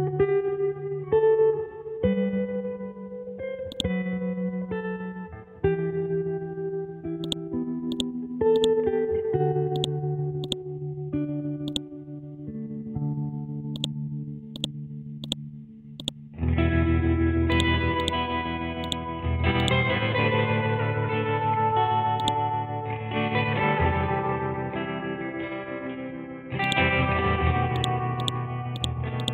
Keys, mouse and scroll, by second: 0.1 scroll up 1, 1.6-3.5 scroll down 1, 3.7 click, 4.4 scroll up 1, 4.5 Down, 6.3-6.9 scroll down 1, 7.1 scroll up 1, 7.2 ctrl+click, 9.3 ctrl+z, 9.7-11.7 drag, 12.2 scroll down 1, 13.7 click, 15.7 c, 16.0 click, 16.6 ctrl+z, 17.5 click, 19.3 c, 19.6 click, 20.1 scroll up 1, 21.2-22.2 scroll down 1, 22.2 click, 22.8-24.4 scroll down 1, 26.6 click.